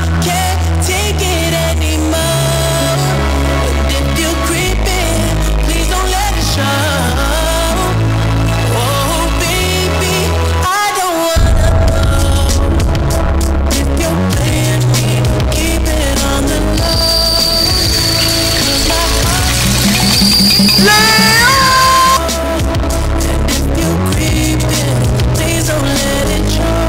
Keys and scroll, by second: 1.3 Down, 1.5 Return, 22.2 Page_Down.